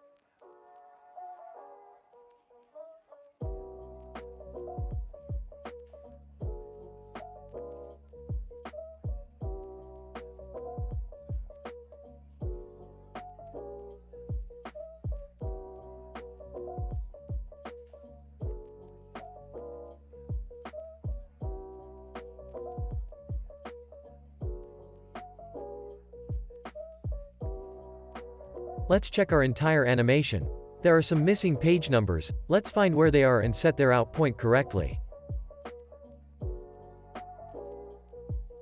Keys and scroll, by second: 2.8 o, 5.1 Delete, 6.4 Delete, 11.5 super+s, 18.7 super+s, 21.7 space, 29.1 space, 29.5 super+s.